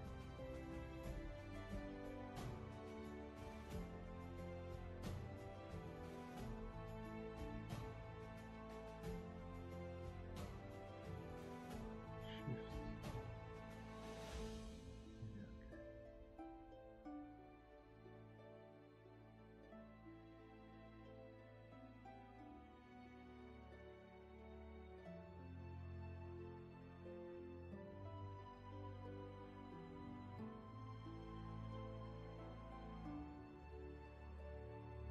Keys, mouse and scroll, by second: 10.2 ctrl+z, 13.3 space, 16.8 space, 30.8 right click.